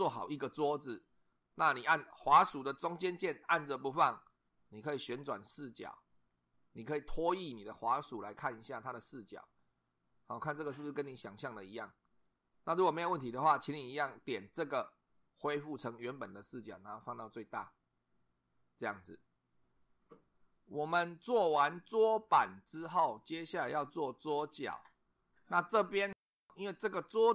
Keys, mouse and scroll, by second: 3.4-12.4 middle drag, 14.5 click, 17.0 click, 19.7 2.